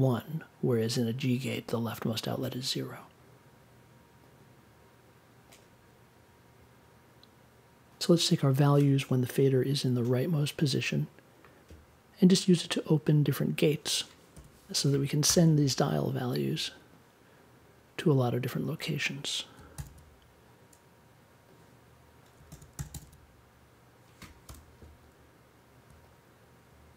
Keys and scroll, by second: 14.2 BackSpace, 19.7 super+d, 22.5 super+d, 24.4 BackSpace.